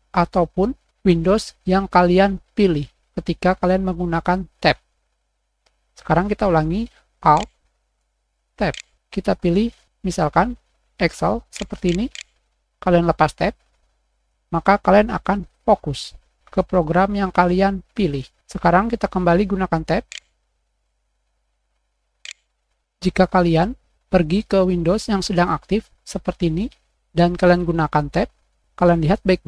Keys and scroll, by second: 6.6 w, 8.6 alt+Tab, 11.4 alt+Tab, 11.7 alt+Tab, 12.0 alt+Tab, 12.6 alt+z, 22.1 alt+Tab, 26.9 Escape, 27.0 Tab.